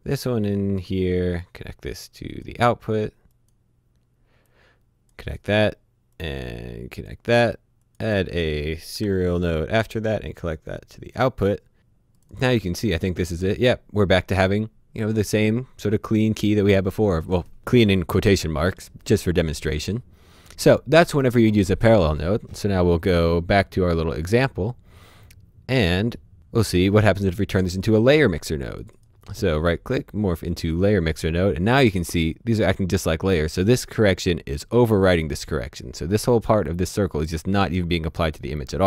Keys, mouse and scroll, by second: 9.0 s, 9.9 click, 10.9 click, 17.6 click, 24.1 click, 25.8 h, 26.3 click, 28.9 right click, 30.5 click, 33.6 click.